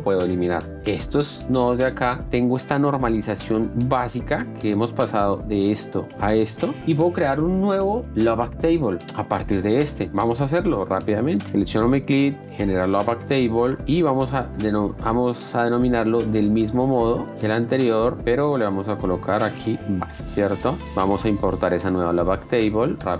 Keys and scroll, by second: 1.5 Delete, 5.9 shift+d, 9.0 F1, 18.5-20.5 typing.